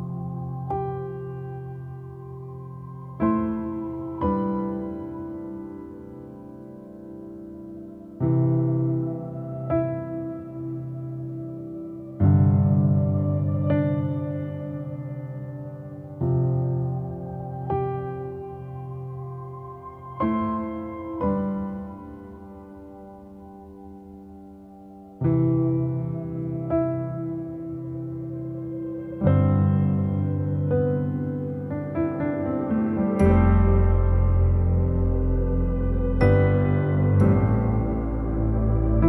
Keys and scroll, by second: 0.2 ctrl+=, 2.2 ctrl+0, 2.7 ctrl+-, 3.8 ctrl+=, 7.0 ctrl+s, 29.9 ctrl+i, 31.0 ctrl+-.